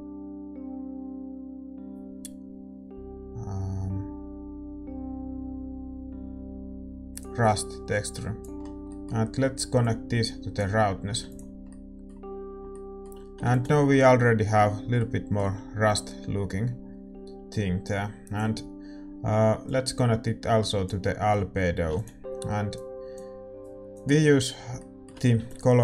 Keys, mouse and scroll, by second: 24.3 ctrl+s.